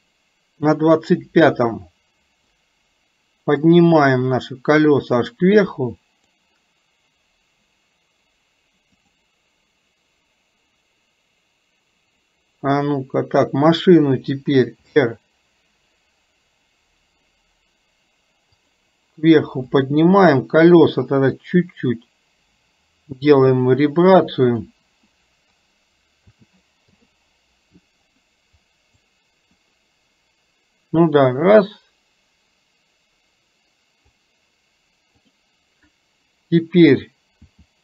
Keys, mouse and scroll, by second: 1.9-2.6 drag, 3.5-6.5 drag, 9.1 click, 19.7 click, 21.6-24.6 drag, 29.2-34.3 drag, 35.3 click.